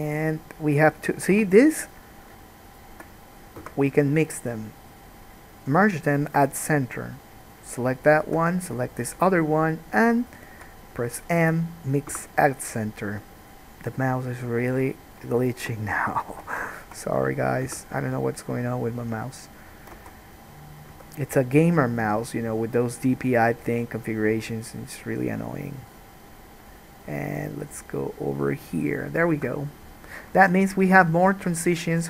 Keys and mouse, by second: 1.5 1, 2.0 click, 2.9 shift+click, 3.8 m, 7.6 click, 8.2 shift+middle click, 9.1 shift+middle click, 9.8 shift+middle click, 12.3 m, 15.0 click, 16.9 shift+click, 17.9 m, 20.2 alt+a, 20.8-32.0 drag, 21.0 k, 30.5 alt+a.